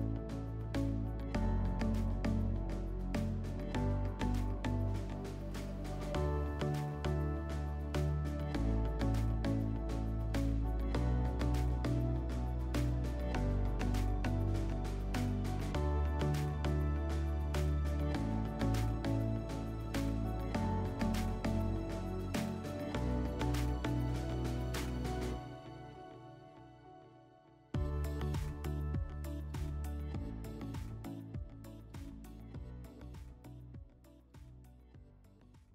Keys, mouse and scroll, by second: 3.2 click, 7.3 alt+middle click, 9.2 middle click, 12.6 alt+middle click.